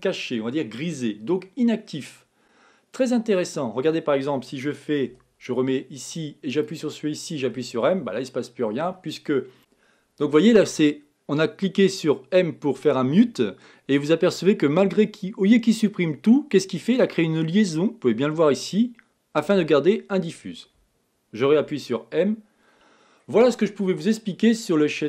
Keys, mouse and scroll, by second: 6.5 m, 6.6 click, 7.6 m, 21.8 m, 24.9 middle click.